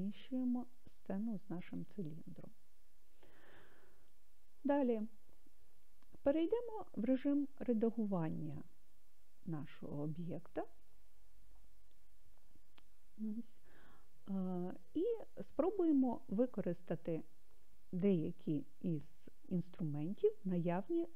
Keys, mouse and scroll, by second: 9.5-11.1 drag.